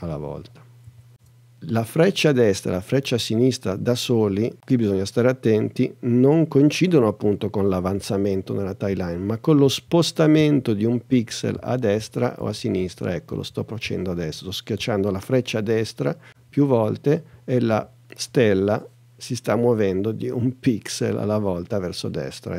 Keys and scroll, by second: 8.0 Right, 9.6 Left, 11.1 Right.